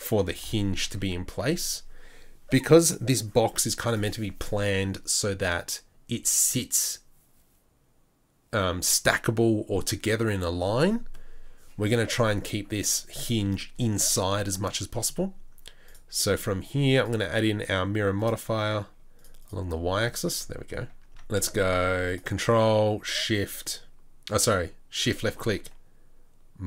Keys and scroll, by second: 0.2 g, 20.5 Tab, 20.9 Tab.